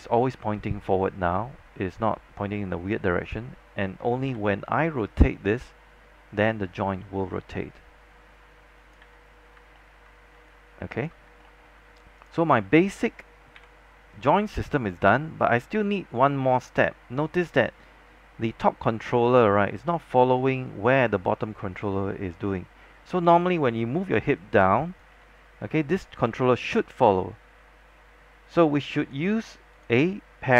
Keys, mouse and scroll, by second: 3.4-4.9 typing, 5.4-9.1 drag, 9.1 z, 9.5 scroll down 1, 9.9 alt+middle click, 10.3 scroll up 1, 10.5 alt+click, 11.4 alt+middle click, 12.3 click, 13.7 w, 14.3-23.6 drag, 23.6 z, 24.5-30.5 drag, 25.6 z.